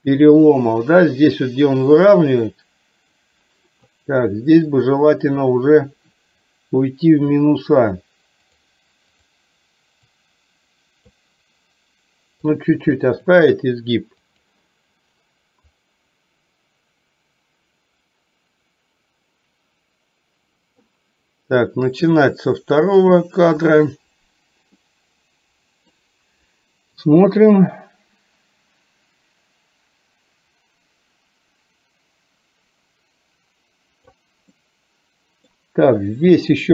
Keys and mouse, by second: 2.2-4.0 drag, 4.9 click, 10.2 click, 12.6 click, 14.2 click, 15.9-20.9 drag, 23.0 click, 24.8-26.0 middle drag, 27.2-34.3 drag, 34.5 middle click.